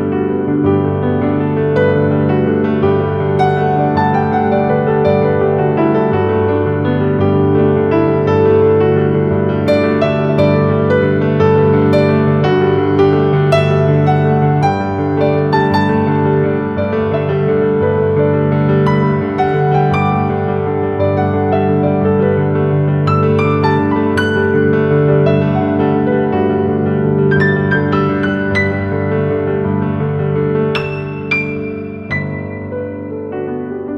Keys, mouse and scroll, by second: 0.2-0.7 scroll down 12, 0.7 shift+middle click, 1.5-2.1 scroll down 2, 2.1 Tab, 4.5 ctrl+a, 8.3-9.3 scroll up 8, 9.3-10.4 shift+middle drag, 10.4-11.0 scroll up 4, 11.0-12.5 shift+middle drag, 12.5-13.0 scroll up 2, 13.0 shift+middle click, 13.6-14.8 scroll up 2, 14.8 ctrl+b, 24.5 Tab, 25.2-26.6 scroll down 15, 26.6-27.2 shift+middle drag, 27.2-29.1 scroll up 7, 29.1 Tab, 30.1 ctrl+r.